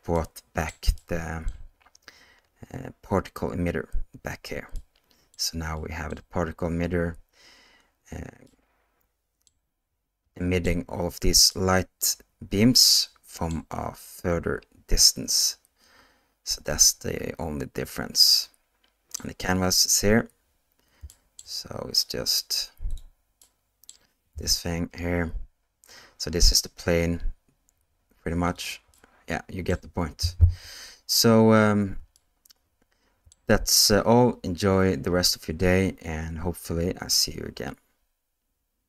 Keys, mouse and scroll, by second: 0.1-0.7 middle drag, 1.0-1.5 shift+middle drag, 4.8-5.3 middle drag, 5.8-6.1 middle drag, 8.5-9.5 middle drag, 10.4 middle click, 11.5-13.5 middle drag, 15.4-19.2 middle drag, 21.1 shift+middle drag, 21.9 click, 22.9 click, 23.4-23.9 middle drag, 24.4 g, 28.9-29.7 middle drag, 30.5 KP_0, 32.2-33.3 shift+middle drag.